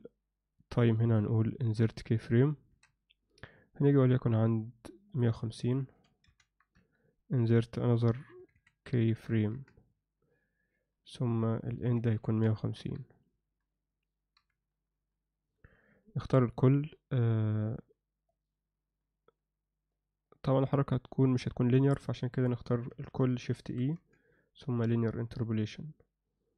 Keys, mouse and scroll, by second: 2.7 i, 5.3-6.7 drag, 8.1-9.1 drag, 8.5 1, 9.5 i, 11.7-12.8 drag, 14.4 Home, 16.2 a, 18.3-22.2 drag, 22.9 a, 23.9 shift+e.